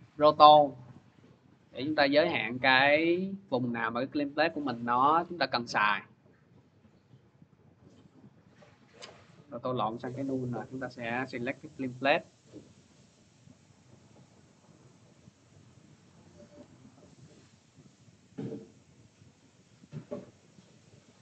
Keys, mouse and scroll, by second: 0.8 click, 1.8 click, 3.1 click, 4.7 click, 6.0 click, 7.6 click, 8.8 m, 9.5 click, 10.1 Delete, 10.9 click, 13.1 click, 13.9 click, 15.1 click, 16.4 ctrl+z, 18.0 click, 19.2 click, 20.5 click.